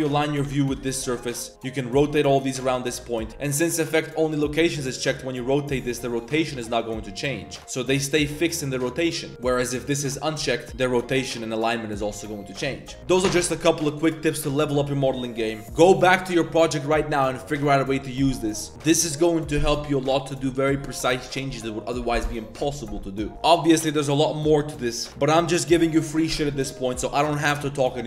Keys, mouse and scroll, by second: 1.0 Tab, 1.1 shift+click, 1.5 r, 3.3-4.4 drag, 4.7 r, 7.9 r, 9.8-10.3 drag, 10.6 r, 13.4-13.9 drag, 14.2 drag, 15.6 drag, 16.5-17.2 drag.